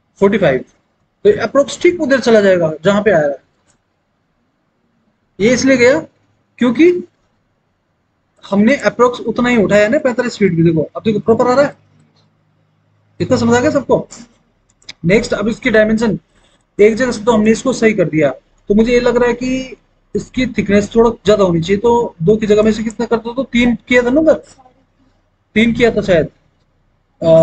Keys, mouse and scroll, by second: 0.3 KP_4, 0.7 KP_5, 3.6 Return, 25.7 KP_3.